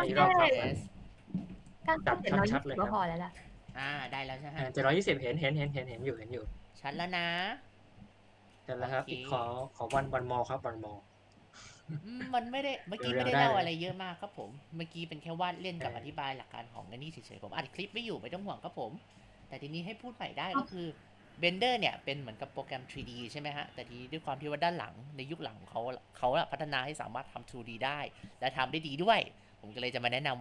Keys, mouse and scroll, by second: 4.7 scroll up 1, 5.1 scroll down 2, 5.5-6.5 shift+middle drag, 6.9-9.1 drag, 9.1 space, 9.4 ctrl+alt+click, 10.3-15.0 ctrl+alt+drag, 15.6-17.3 drag, 18.3-20.4 ctrl+alt+drag, 21.0 ctrl+alt+click, 22.1 click, 22.7 click, 23.8 ctrl+z, 25.6 click.